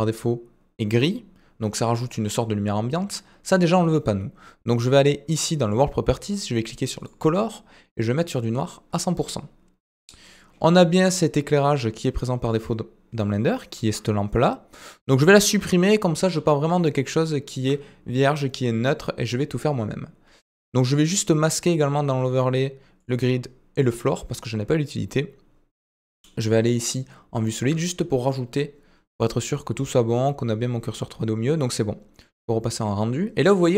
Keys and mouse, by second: 10.7-11.1 shift+middle drag, 12.4 click, 15.5 typing, 16.8-17.5 shift+middle drag, 22.0-24.1 drag, 25.8 click, 26.7-27.6 shift+middle drag, 32.8 click.